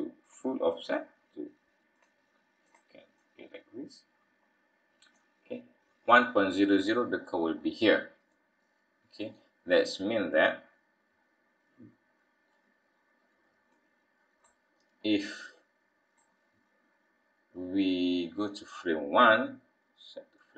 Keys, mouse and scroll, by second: 0.8 click, 3.1 click, 8.3 middle click, 13.7 click, 15.5 click.